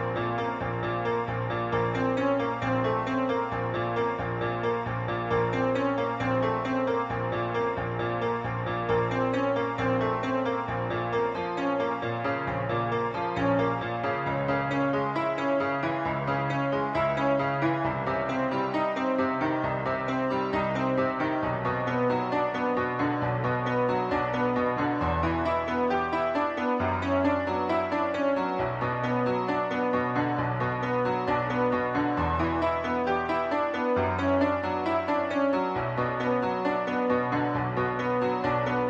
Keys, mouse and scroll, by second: 0.3 click, 1.9 click, 2.5-2.8 scroll up 3, 3.3-3.7 scroll down 2, 4.1 scroll down 1, 4.6 shift+middle click, 6.1 middle click, 7.4 middle click, 8.6 b, 8.6 click, 9.8-12.4 typing, 15.0 click, 17.1 click, 17.9-18.4 typing, 19.7-21.4 click, 20.3 7, 21.7 a, 22.2 b, 22.5 click, 24.0-25.4 typing, 26.5 click, 27.5 click, 28.5 click, 30.4 typing, 31.1 click, 32.8-33.2 typing, 35.2 click, 35.6 scroll down 2, 35.9 middle click, 37.2 scroll down 1, 37.4 middle click.